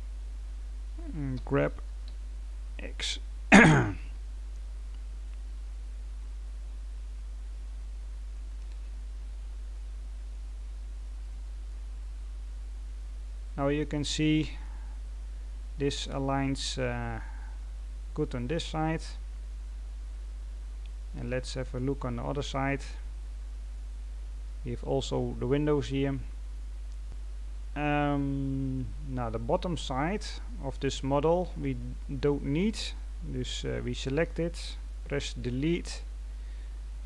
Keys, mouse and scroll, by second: 1.3 g, 8.4 scroll down 1, 9.3-9.7 scroll down 1, 9.7 middle click, 10.5-11.1 scroll down 5, 11.1 middle click, 11.9-13.3 scroll up 4, 13.3-14.1 scroll down 2, 14.1 middle click, 14.9-15.7 scroll up 2, 15.7-17.2 scroll down 2, 17.2-18.4 scroll up 1, 18.4 right click, 20.5-21.2 scroll down 7, 21.2 middle click, 22.1-23.1 scroll up 3, 23.1-23.4 scroll up 2, 23.4-24.3 scroll down 1, 27.0-28.3 middle drag, 29.8-30.8 scroll up 2, 30.8 right click, 31.3-31.7 scroll down 2, 31.7-32.2 scroll up 2, 32.2-34.5 scroll down 1.